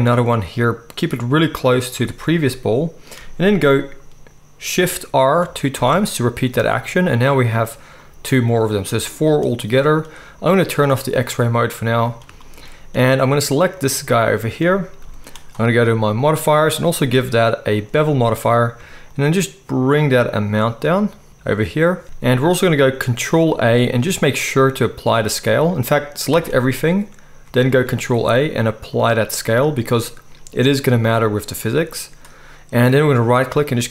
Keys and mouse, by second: 5.4 shift+r, 5.7 shift+r, 10.8-13.9 drag, 13.9-16.2 middle drag, 15.0 g, 16.2 click, 16.2-16.8 middle drag, 16.8-33.9 drag, 22.0 ctrl+a, 22.0 ctrl+z, 23.5 ctrl+a, 26.3 a, 27.7 ctrl+a, 33.1-33.9 right drag.